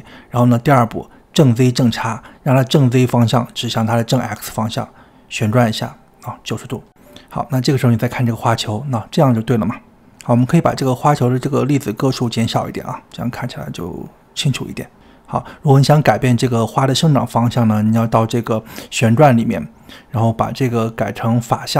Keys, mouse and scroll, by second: 0.6 KP_1, 2.7 r, 7.2 click, 7.9-8.3 scroll down 3, 9.0 middle click, 9.5 scroll up 7, 9.7 shift+middle click, 9.8 click, 9.9 middle click, 10.2 click, 10.5 scroll down 1, 10.7-11.3 scroll up 1, 11.3 click, 12.8-20.0 middle drag, 20.0-21.7 drag.